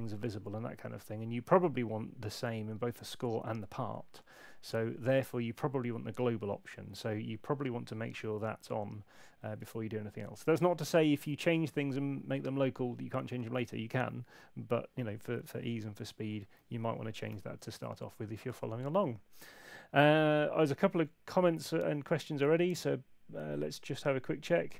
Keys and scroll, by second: 6.9 F6, 17.3 super+8.